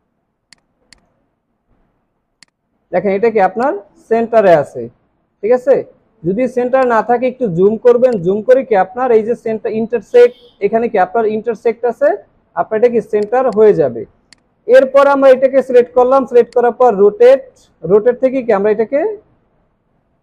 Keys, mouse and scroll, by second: 1.0 double click, 6.0-6.5 alt+scroll up 3, 7.5 alt+scroll up 1, 12.1 alt+scroll down 1, 13.5 space, 13.6 double click, 14.7 alt+scroll down 1, 14.9 space.